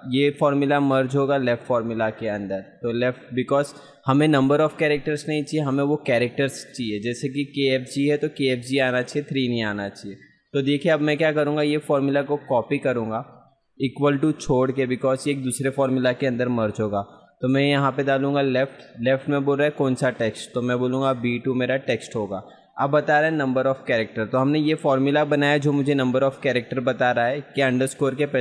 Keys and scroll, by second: 10.7 F2, 14.5 ctrl+c, 24.4 ctrl+v.